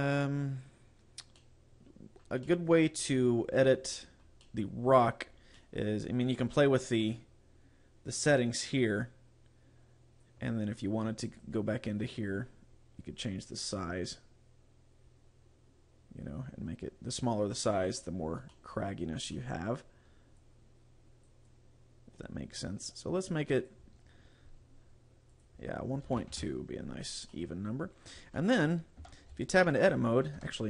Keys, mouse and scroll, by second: 1.4 middle click, 2.5 middle click, 4.6 middle click, 5.6 middle click, 8.9 click, 11.4 click, 12.3-13.0 scroll down 7, 13.7 click, 18.6 middle click, 19.4 middle click, 20.5 click, 21.5 click, 23.7 click, 25.3 click, 27.4 middle click, 28.5 middle click, 29.1 Tab, 30.5 Tab.